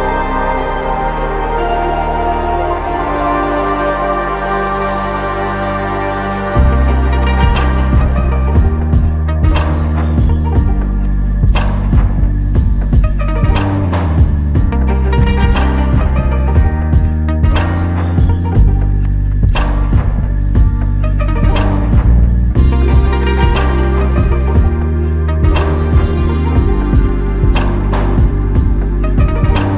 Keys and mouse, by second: 10.4 shift+click, 20.2 shift+click, 20.9 ctrl+click, 21.6 shift+click, 27.4 alt+click, 28.5 alt+click.